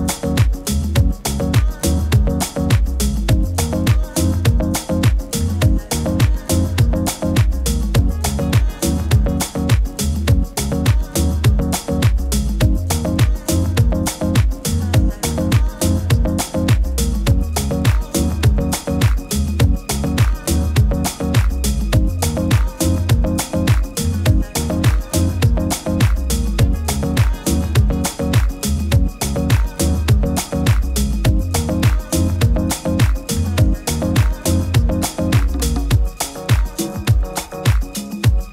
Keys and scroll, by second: 11.0 super+z, 26.8 super+t, 29.2 super+t.